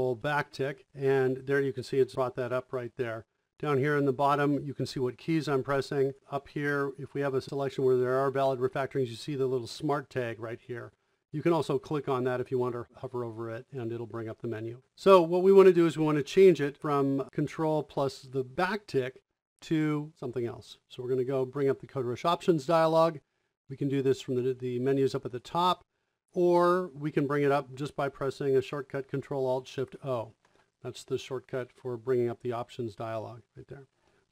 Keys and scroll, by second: 0.4 ctrl+`.